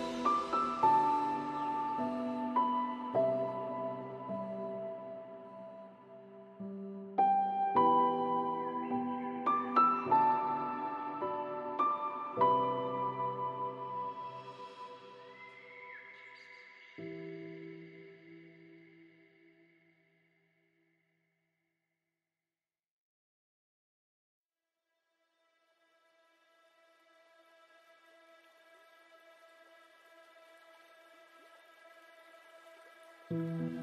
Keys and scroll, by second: 3.5 ctrl+space, 14.9 ctrl+space, 33.1 ctrl+space.